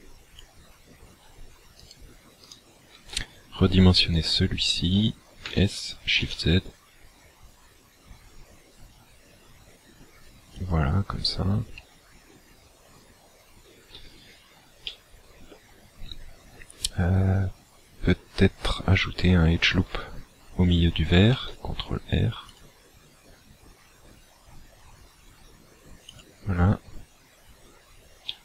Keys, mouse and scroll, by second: 1.8 alt+right click, 2.5 alt+right click, 5.4 s, 10.7 click, 14.9 shift+middle click, 21.1 ctrl+r, 26.1 click.